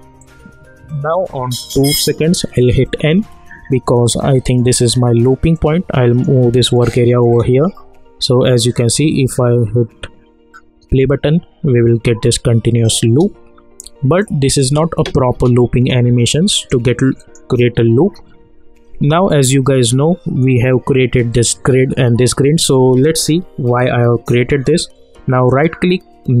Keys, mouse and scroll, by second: 2.8 n, 5.5-7.2 drag, 7.2 space, 13.0 space, 14.2 click, 14.6 space, 16.3 click, 17.7 u, 19.4-20.0 alt+scroll up 1, 25.4-26.4 alt+scroll up 1.